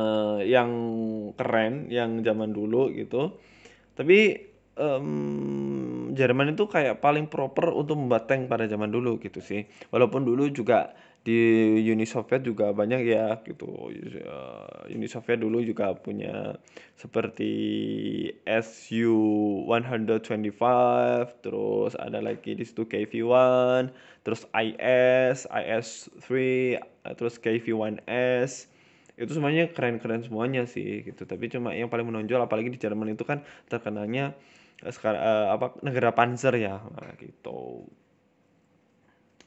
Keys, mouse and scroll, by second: 11.2 middle click, 11.6 scroll down 2, 11.7 middle click, 12.3 r, 13.2 e, 14.6 Tab, 14.8 middle click, 15.0 scroll down 5, 15.2 middle click, 16.2 middle click, 16.7 middle click, 17.0 s, 18.4 Tab, 18.6 middle click, 18.9 Tab, 19.1 middle click, 19.6 z, 20.2 middle click, 20.8-21.2 scroll up 2, 21.0 middle click, 22.1 middle click, 22.5 KP_1, 22.7 Tab, 23.0-23.4 scroll up 2, 23.4 shift+middle click, 24.0 click, 24.4 click, 24.9 click, 25.6 click, 26.8 z, 27.2 z, 27.7 middle click, 28.3 z, 28.8 middle click, 29.3 right click, 29.9 shift+right click, 30.2 shift+middle click, 30.7 shift+right click, 31.2 ctrl+z, 31.4 middle click, 32.0 shift+right click, 32.9 shift+middle click, 33.6 middle click, 34.0 middle click, 34.1 shift+middle click, 34.5 shift+right click, 34.8 middle click, 35.2 middle click, 36.1 shift+right click, 36.3 middle click, 36.7 shift+middle click, 37.3 shift+right click, 37.4 middle click, 38.6 shift+right click, 38.7 middle click, 39.0 middle click.